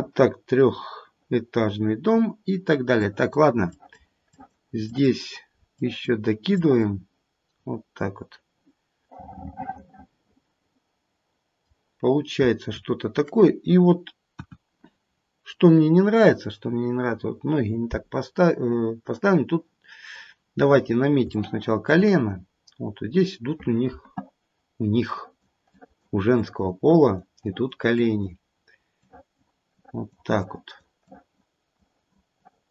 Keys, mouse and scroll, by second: 1.2 middle click, 1.9-2.9 scroll up 2, 2.9 click, 2.9-3.7 scroll up 1, 3.7 click, 4.3 click, 4.9 click, 5.7 click, 6.4 click, 7.5-9.1 scroll down 1, 9.1 middle click, 9.1 scroll down 2, 11.9-14.3 scroll down 3, 14.3 KP_1, 15.0-15.4 scroll up 1, 15.4-17.4 scroll down 1, 20.1-21.1 scroll up 4, 21.2 shift+middle click, 22.3-23.3 scroll up 1, 25.0 click, 25.7 click, 26.3 click, 26.9 click, 27.4 click, 27.9 click, 29.0 click, 29.7 click, 30.4 click, 31.0 click, 31.8 click, 32.4 click.